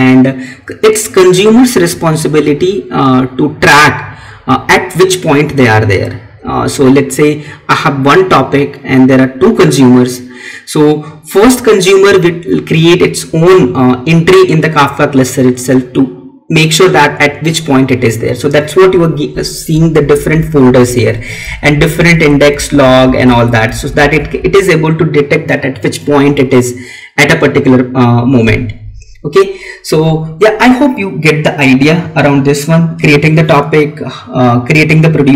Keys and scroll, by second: 19.8 Down, 20.6 Right, 21.3 Down, 22.1 Right, 22.9 Down.